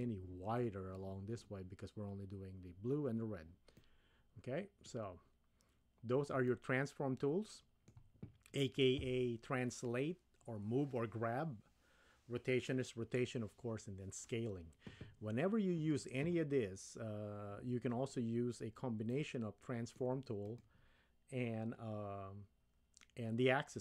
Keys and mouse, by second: 3.8-4.9 middle drag, 6.5-8.0 shift+middle drag, 19.1-20.1 middle drag, 20.5 click.